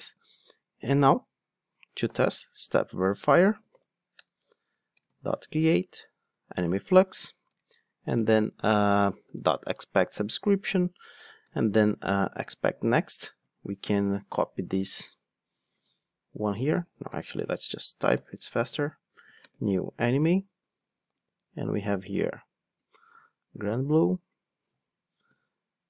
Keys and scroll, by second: 2.8 Return, 15.8 super+c, 19.4 ctrl+space, 19.8 Return, 21.9 super+c, 23.1 super+v, 25.2 super+c.